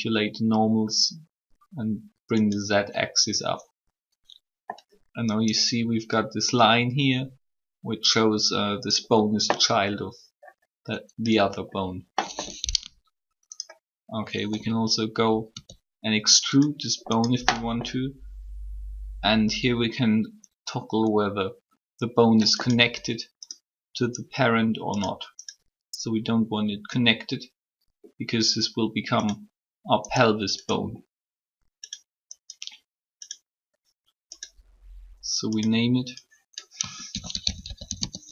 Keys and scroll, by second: 15.5 e, 36.8 typing.